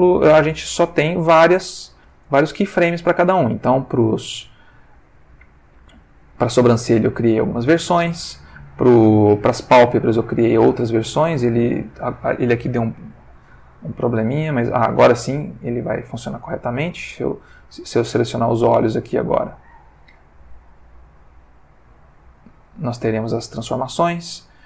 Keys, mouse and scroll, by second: 1.0-2.4 drag, 2.8-8.6 drag, 10.1 click, 11.6 click, 12.6 click, 13.9-16.1 drag, 17.1 click, 17.8 click, 20.1-22.6 drag, 23.5 click.